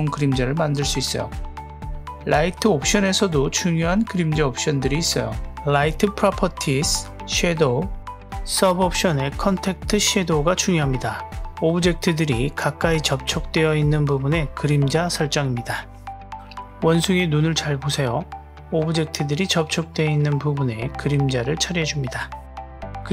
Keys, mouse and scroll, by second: 1.3 click, 2.8 drag, 4.3 click, 6.6 click, 7.5 click, 8.6 drag, 9.0-10.5 scroll down 1, 10.5 click, 13.9 click, 14.8-17.1 scroll up 1, 17.6 click, 19.0 click, 19.6 click, 21.7 click.